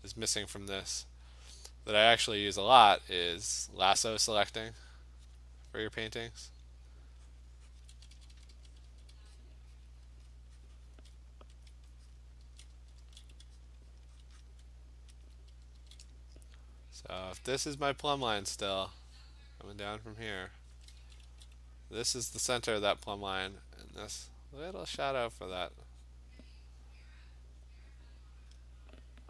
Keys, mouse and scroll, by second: 0.0 click, 0.4 click, 0.8 alt+click, 0.9 alt+click, 1.1 click, 1.2 alt+click, 1.5 click, 2.1 alt+click, 2.3 click, 2.6 click, 3.3 click, 3.6 click, 3.8-5.6 alt+click, 4.0 click, 4.9 click, 5.4 click, 5.7 click, 6.6 alt+click, 6.9 click, 7.3 click, 7.8 click, 7.9-9.1 typing, 8.6 click, 9.4 click, 9.8 click, 10.3 click, 10.7 click, 11.0 click, 11.7 alt+click, 12.1 click, 12.4 [, 12.7 [, 13.0 [, 13.4 click, 13.7 click, 14.0 click, 14.2 click, 14.4 click, 15.2 alt+click, 15.5 [, 15.8 [, 17.2 [, 20.7 [, 21.0 [, 21.3 [, 24.9 click, 26.3 click, 28.5 click.